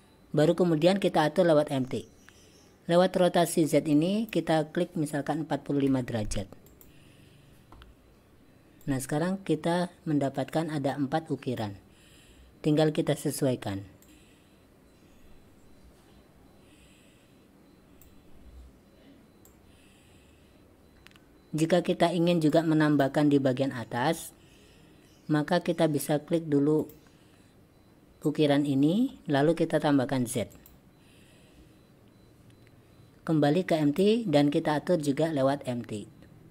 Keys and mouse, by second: 4.0-7.0 drag, 9.0-11.7 drag, 14.1-18.1 drag, 19.6-21.0 drag, 22.6-23.1 drag, 26.9 click, 34.0 click.